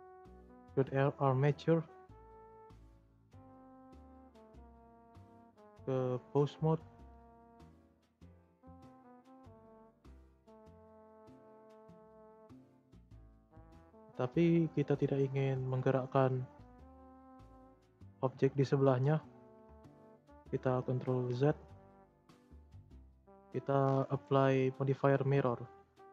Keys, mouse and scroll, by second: 1.6 click, 2.3-2.7 middle drag, 2.7 Tab, 3.0-3.5 scroll up 2, 3.5 click, 3.9 shift+middle click, 4.5-5.1 scroll down 1, 5.1-8.1 drag, 8.1 e, 8.9 click, 9.3 click, 10.5 r, 14.4-14.9 shift+middle drag, 14.9 scroll up 1, 15.1 scroll down 2, 15.2-17.7 middle drag, 17.7 scroll up 1, 17.7-18.3 middle drag, 18.3 shift+scroll up 1, 18.3-18.8 shift+middle drag, 18.8 r, 20.5 ctrl+z, 20.7-21.9 ctrl+z, 23.8 scroll down 3, 25.6-26.1 drag.